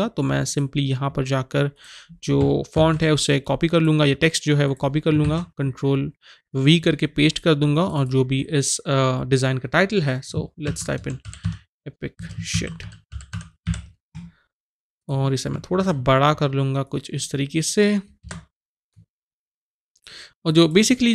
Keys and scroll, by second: 2.8 ctrl+c, 5.2 ctrl+v, 10.4-14.1 typing, 15.7 ctrl+t, 18.2 Return.